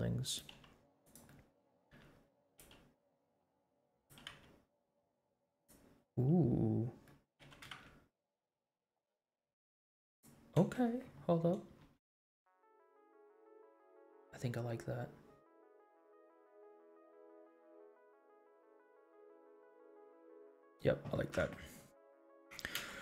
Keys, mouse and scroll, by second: 0.5 g, 1.3 middle click, 1.8 r, 2.6 g, 4.1 g, 7.0 middle click, 7.4 g, 10.6 space, 11.8 space, 12.6 space, 13.6 space, 14.7 scroll down 2, 15.8-16.1 scroll up 2, 16.5 space, 18.1 space, 18.9 space, 20.1 space, 21.8 ctrl+s.